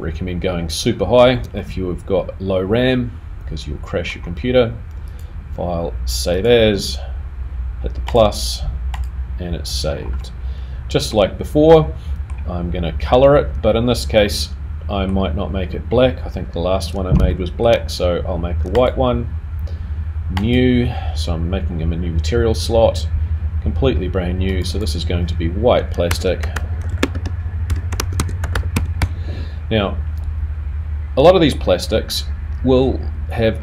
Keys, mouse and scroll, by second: 0.5 click, 0.9-1.6 scroll down 3, 1.6 middle click, 5.6 click, 9.8-10.3 scroll down 2, 10.3 middle click, 11.7 middle click, 14.6 middle click, 16.8-17.5 scroll up 3, 17.5 shift+middle click, 18.7 click, 21.0 click, 26.0 click.